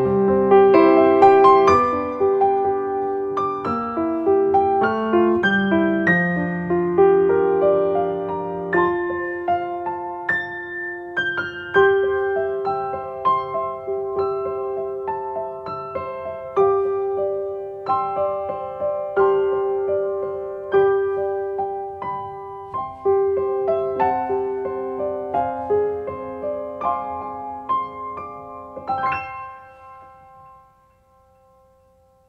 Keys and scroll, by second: 1.3 space, 10.3 space.